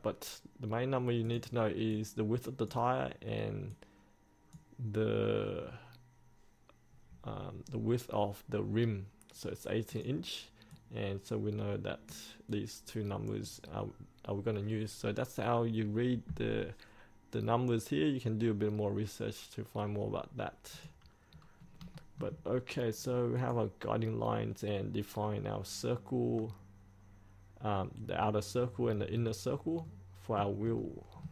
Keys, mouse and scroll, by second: 21.3 scroll up 1, 22.0 shift+middle click, 23.4 click, 29.2 scroll down 1, 29.9 middle click, 30.8 shift+middle click.